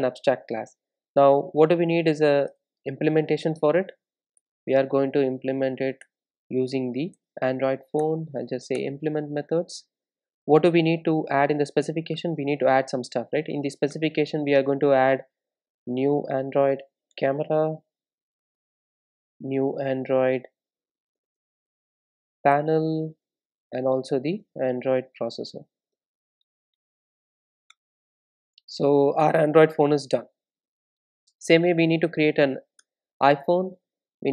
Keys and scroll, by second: 12.2 Return, 22.6 super+d, 23.2 Return, 27.8 Return, 30.7 super+s, 31.4 super+s, 31.4 super+b.